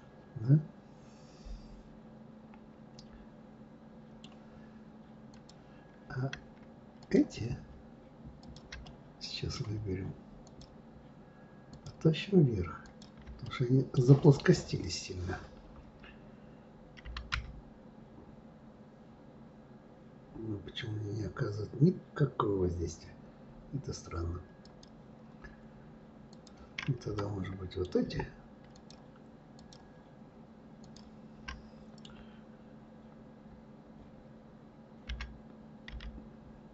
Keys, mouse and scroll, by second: 5.3 click, 5.4 right click, 7.0 click, 8.4 shift+click, 8.8-10.4 middle drag, 10.4 shift+click, 10.5 shift+right click, 11.6 shift+click, 12.8 shift+click, 13.4-16.4 middle drag, 26.3 click, 27.1-28.8 middle drag, 28.8 shift+click, 29.5 shift+click, 30.8 shift+click, 31.4-34.5 middle drag.